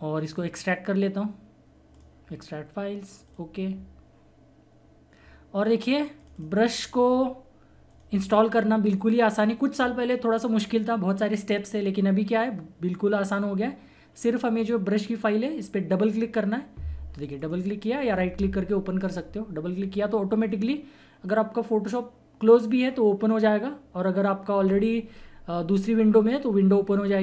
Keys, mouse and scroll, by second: 0.2 right click, 1.9 click, 5.9 typing, 6.1 click, 17.2 click.